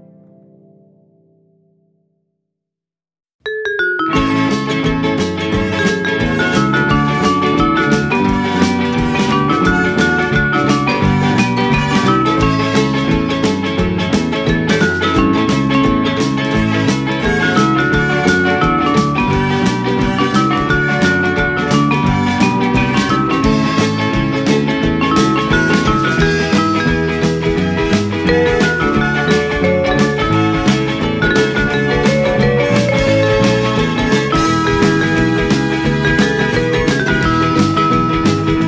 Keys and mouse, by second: 0.4 click, 0.5 s, 1.1 click, 1.4 g, 3.4 click, 4.3 g, 4.6 z, 6.6 click, 7.7 middle click, 8.7 shift+middle click, 10.0 F6, 10.7 shift+a, 12.4 click, 13.3 g, 13.6 y, 14.6 click, 14.8 g, 15.1 z, 15.6 click, 16.0 KP_1, 17.2 e, 20.0 click, 20.2 e, 22.1 click, 23.8 click, 25.1 ctrl+b, 25.7 click, 27.1 click, 29.1 click, 31.2 shift+middle click, 32.2 click, 32.7 g, 32.8 z, 33.9 click, 35.0 g, 35.9 click, 37.3 o, 37.9 r.